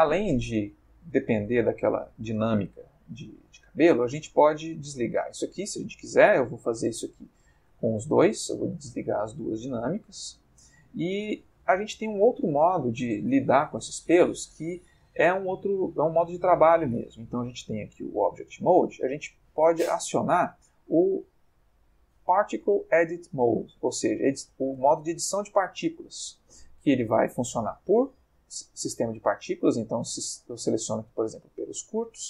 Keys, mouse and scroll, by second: 1.8 click, 5.2 click, 6.9 middle click, 7.8 click, 8.7 click, 9.9-10.9 ctrl+middle drag, 18.3 click, 24.0 click, 27.0 click, 27.7 click, 28.4 click, 28.8 click, 29.2 click, 30.4 click.